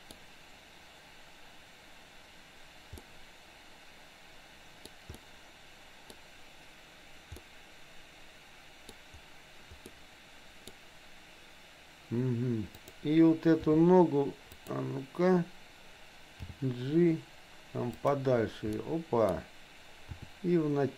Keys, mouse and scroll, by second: 3.0 scroll up 1, 3.1-5.0 middle drag, 5.2 middle click, 7.5-9.0 middle drag, 9.8 scroll up 1, 10.0 middle click, 12.8 click, 13.6 r, 16.6 g, 18.8 middle click, 20.2 r.